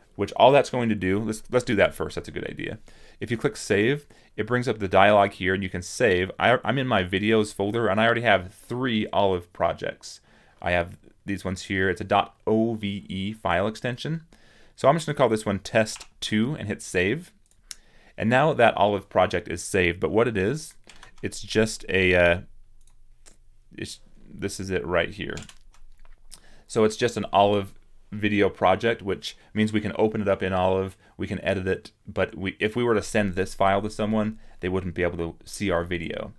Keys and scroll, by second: 21.0 super+-, 24.1 super+-.